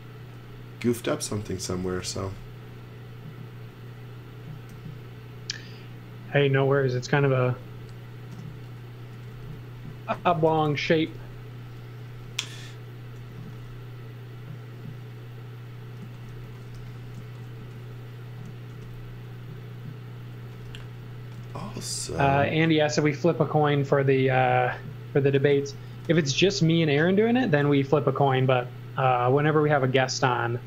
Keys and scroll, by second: 0.2 space, 1.2-2.5 typing, 4.7 e, 8.3-11.6 typing, 13.2 m, 15.8-18.7 typing, 20.2-22.5 typing, 25.3-26.6 typing, 27.7 m.